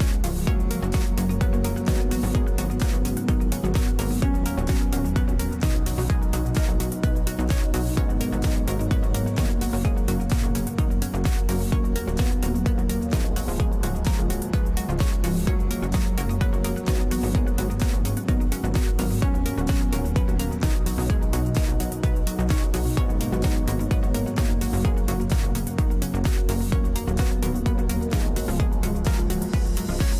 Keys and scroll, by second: 19.0 w, 25.7 w.